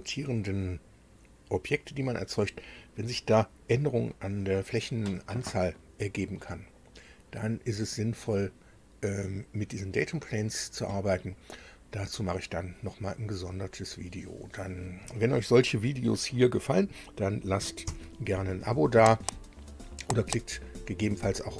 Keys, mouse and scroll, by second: 17.6 super+u.